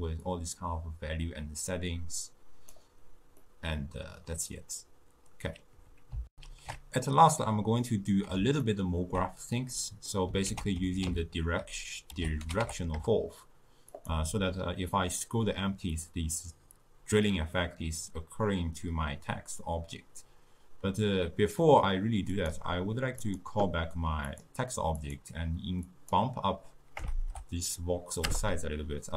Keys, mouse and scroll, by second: 0.3-3.4 drag, 3.5-6.3 middle drag, 6.3 ctrl+alt+shift+q, 7.8-10.5 middle drag, 10.5 ctrl+a, 22.8 click, 23.3 click, 24.3-28.2 drag.